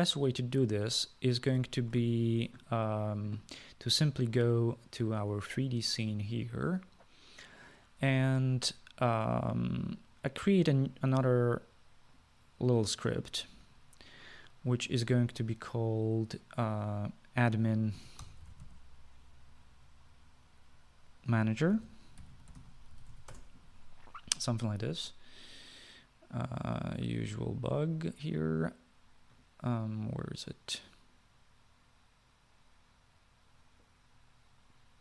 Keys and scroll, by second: 2.8 ctrl+s, 18.9-20.3 typing, 22.7-24.8 typing.